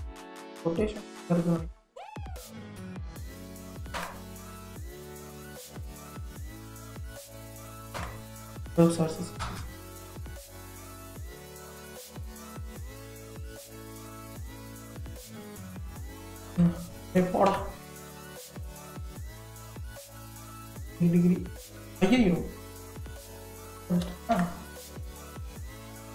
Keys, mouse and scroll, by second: 0.0-2.0 middle drag, 2.0-5.0 drag, 6.2-9.3 drag, 9.4 ctrl+z, 10.8-13.8 drag, 16.5 BackSpace, 17.1 9, 17.5 Return, 20.9 click, 22.8-25.9 drag, 25.9 scroll up 1.